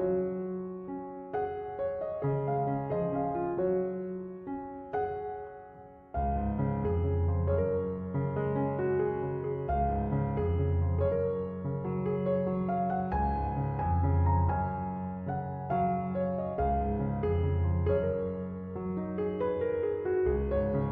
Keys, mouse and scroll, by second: 17.5 5, 17.7 Return.